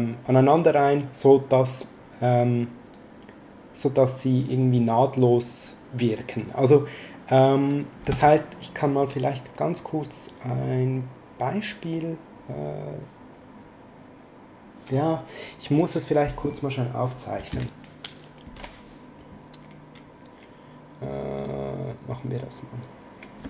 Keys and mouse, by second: 21.4 click.